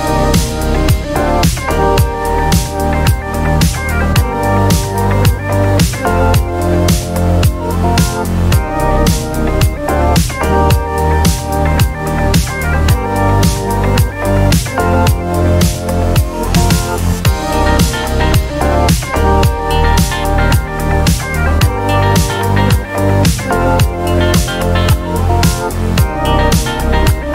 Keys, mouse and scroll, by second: 1.6 click, 2.1 click, 5.0 ctrl+d, 6.1 ctrl+click, 8.1 KP_5, 9.3 Delete, 10.6 click, 12.2 ctrl+d, 12.8-15.3 ctrl+drag, 15.5 ctrl+click, 17.4 click, 19.3 Delete, 20.9 click, 22.1-22.5 ctrl+scroll up 4, 22.9 ctrl+scroll up 2, 23.5 ctrl+click, 25.1 click.